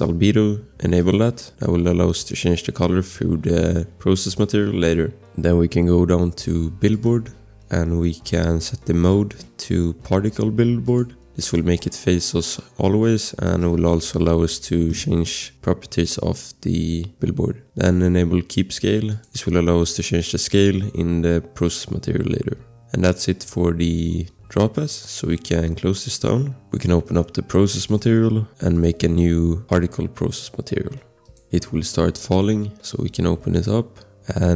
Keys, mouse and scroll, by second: 1.0 click, 3.9 scroll, 5.4 click, 5.8 scroll, 6.9 click, 11.0 click, 11.4 scroll, 13.4 click, 13.7 click, 17.3 scroll, 19.1 click, 22.7 scroll, 26.1 click, 27.8 click, 33.5 click, 34.1 scroll.